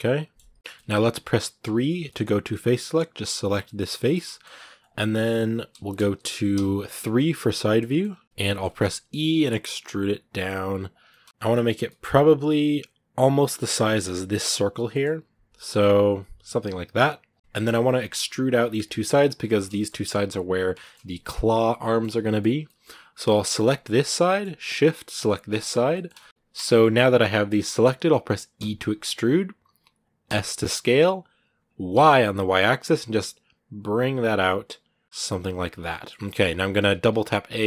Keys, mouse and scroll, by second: 0.8-1.4 scroll up 2, 1.4 3, 1.9 middle click, 2.7-4.9 right drag, 4.9 scroll down 2, 4.9 middle click, 5.8 KP_1, 8.2 shift+middle click, 8.8 e, 11.0 scroll down 2, 11.2 shift+middle click, 11.6 g, 17.3-19.2 middle drag, 19.2 scroll up 1, 19.2-22.3 shift+middle drag, 22.3 scroll down 1, 22.4-23.5 middle drag, 23.5 right click, 23.8-25.3 middle drag, 25.3 shift+right click, 25.7 shift+middle click, 26.3 ctrl+z, 26.4-27.4 middle drag, 27.4-28.4 scroll up 1, 28.4 e, 35.4 scroll down 1, 35.6 middle click, 36.2 scroll up 2, 36.6 a, 37.2 scroll down 2, 37.4 middle click.